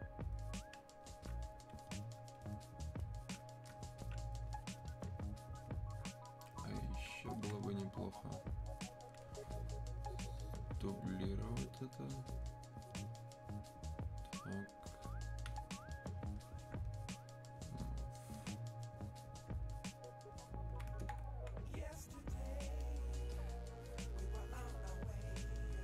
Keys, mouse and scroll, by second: 7.1 alt+click, 7.3-11.2 alt+drag, 11.5 click, 17.4-25.8 drag.